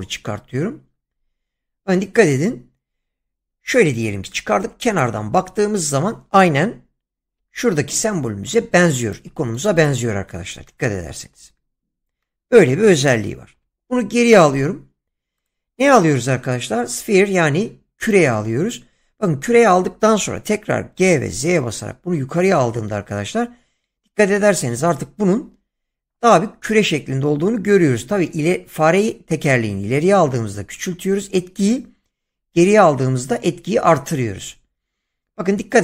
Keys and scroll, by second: 7.3 <, 13.5 ctrl+z, 20.9 g, 21.6 z.